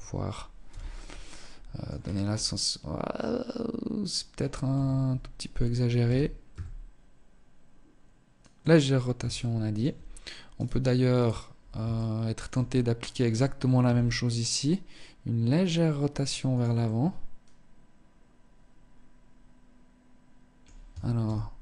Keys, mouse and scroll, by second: 0.4 middle click, 0.9-1.3 scroll down 6, 1.4 middle click, 3.8 KP_3, 5.1 r, 8.4 shift+middle click, 9.7 right click, 10.4 right click, 11.0 shift+middle click, 11.8-12.9 scroll up 3, 12.9 r, 15.8 middle click, 20.4 ctrl+z, 21.1 middle click.